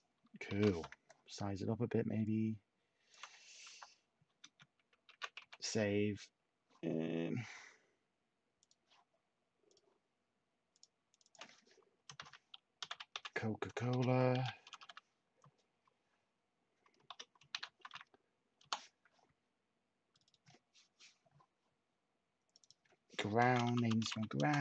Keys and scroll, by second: 0.5 h, 3.6 F2, 5.1 typing, 12.1-15.9 typing, 17.2-18.4 typing, 18.6 Return, 23.2-24.6 typing.